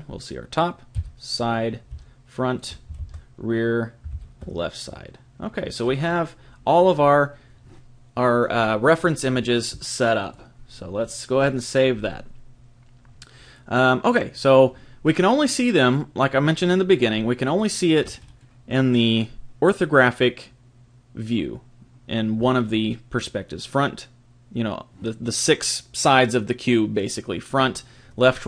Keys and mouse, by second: 0.9 KP_3, 1.9 KP_1, 10.2 click, 17.4 click, 19.4-24.8 middle drag.